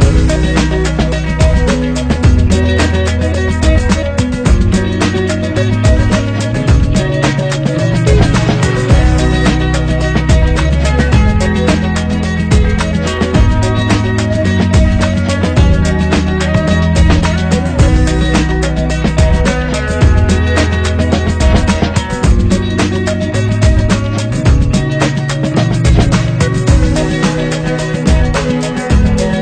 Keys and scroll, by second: 10.3 ctrl+=, 25.2 ctrl+=.